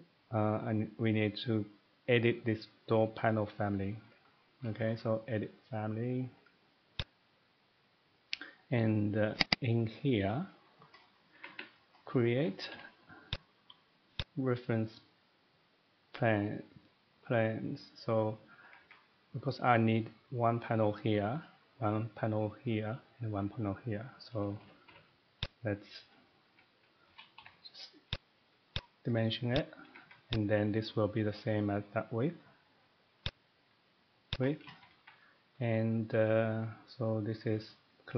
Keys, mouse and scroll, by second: 7.0 click, 9.4 click, 9.6 click, 10.5 middle click, 11.0-11.3 scroll up 3, 11.3 middle click, 11.4 Escape, 11.5 Escape, 11.9 middle click, 12.0 scroll down 1, 12.2 middle click, 12.3-12.7 typing, 13.3 click, 13.3-14.2 scroll, 14.2 click, 18.6 Escape, 18.8 Escape, 24.4 middle click, 24.6 typing, 25.4 click, 26.5 Escape, 26.9-27.7 typing, 27.1 middle click, 28.1 click, 28.8 click, 29.0 middle click, 29.6 click, 29.9 Escape, 30.1 Escape, 30.8 click, 33.3 click, 34.3 click, 34.8 Escape, 35.0 Escape, 35.4 middle click.